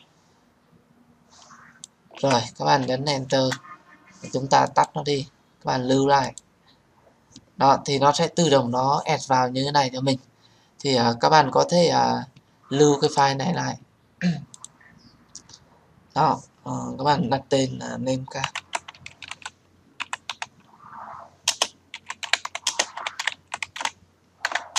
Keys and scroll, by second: 3.0 Return, 24.1 BackSpace.